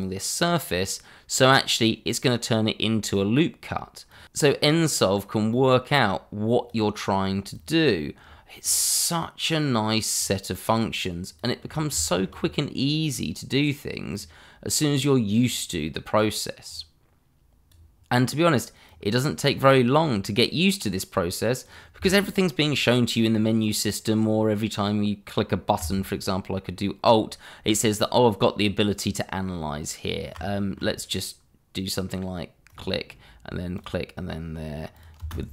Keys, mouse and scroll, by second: 4.2 ctrl+z, 5.5 click, 11.5-12.0 scroll down 1, 12.0 shift+middle click, 12.3-14.1 scroll up 1, 14.1 click, 30.5 shift+middle click, 32.7 right click, 33.7 click, 35.2 space.